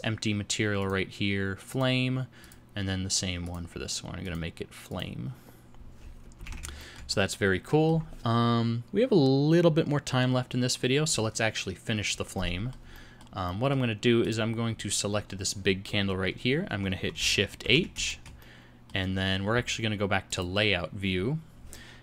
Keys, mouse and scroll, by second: 20.3 shift+middle click, 20.3 click, 20.3 shift+h.